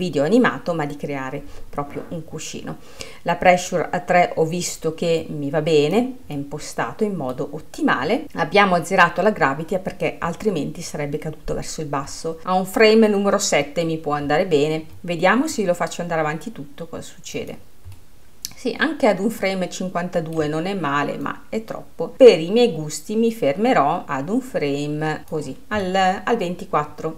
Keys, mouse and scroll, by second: 5.2-6.4 drag, 6.4-8.2 middle drag, 8.2-8.8 scroll down 3, 8.8-12.4 scroll down 7, 12.4-14.9 middle drag, 15.6-18.0 drag, 18.0-21.1 middle drag, 21.4-23.6 drag, 25.9-27.1 middle drag.